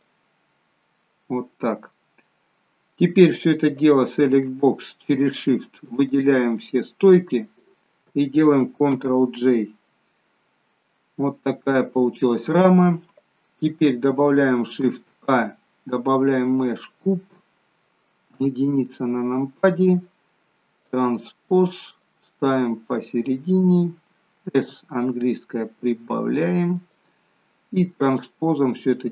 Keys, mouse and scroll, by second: 1.8-2.8 scroll down 1, 3.3 click, 3.7 click, 5.2 shift+click, 6.7 shift+click, 8.9 ctrl+j, 10.7 middle click, 14.6 shift+a, 18.3 KP_1, 20.8 click, 24.5 s, 28.5 click.